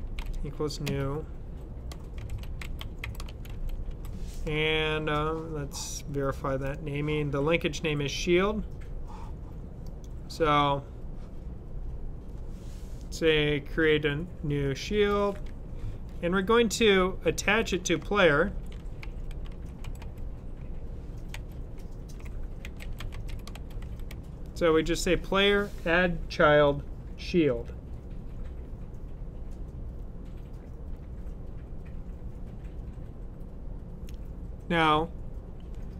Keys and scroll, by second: 0.0-0.6 typing, 1.8-4.2 typing, 17.0-24.2 typing.